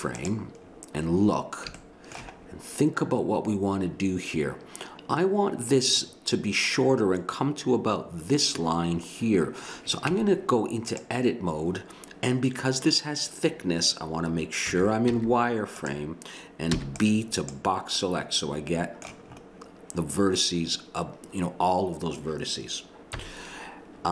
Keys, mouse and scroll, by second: 0.7 middle click, 1.3 click, 10.1 Tab, 14.7 z, 16.8 b, 18.0 middle click, 20.0-21.7 middle drag, 23.1 KP_1.